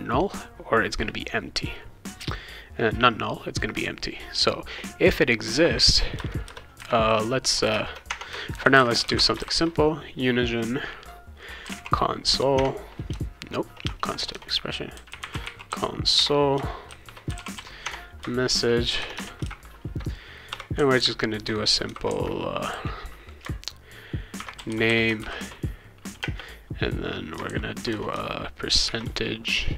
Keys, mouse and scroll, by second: 6.2 Return, 6.4 Return, 8.1 Tab, 8.3-9.9 typing, 11.4-19.4 typing, 12.5 Tab, 20.5 ;, 21.9 shift+', 24.1-26.2 typing, 27.4 shift+[, 27.9 BackSpace, 28.9 shift+5.